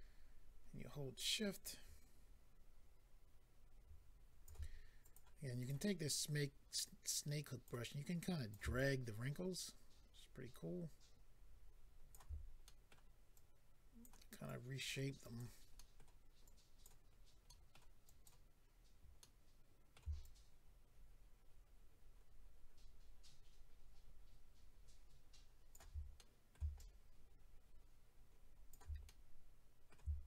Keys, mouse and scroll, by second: 5.0 click, 5.1 click, 5.5 click, 5.6 double click, 5.9-6.8 scroll up 1, 6.8 double click, 6.8 scroll up 1, 8.2 click, 8.7 shift+click, 12.7 middle click, 13.4 click, 14.5 click, 15.2 click, 15.4 click, 15.7 middle click, 16.4 click, 17.4 middle click, 18.0 click, 18.7 scroll down 1, 19.2 middle click, 20.2 shift+click, 26.1 middle click, 26.7 shift+click, 29.0 middle click.